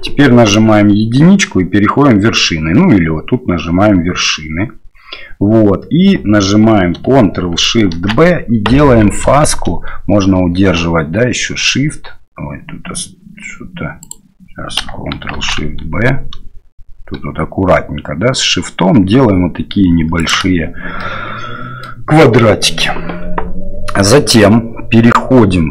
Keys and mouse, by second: 0.5 1, 8.0 ctrl+shift+b, 15.4 ctrl+shift+b, 21.1 click.